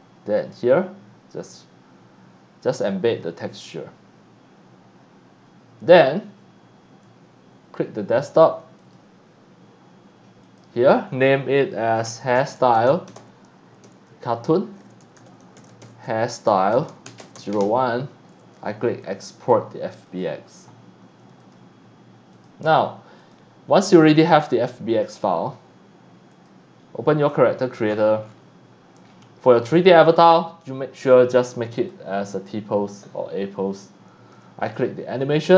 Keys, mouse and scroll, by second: 8.8 click, 10.5 click, 11.9-18.1 typing, 19.0 click, 20.1 click, 21.4 click, 22.3 click, 23.2 click, 26.3 click, 27.6-28.4 scroll down 3, 29.1-29.5 scroll up 2, 31.8 click, 34.7 click, 35.5 click.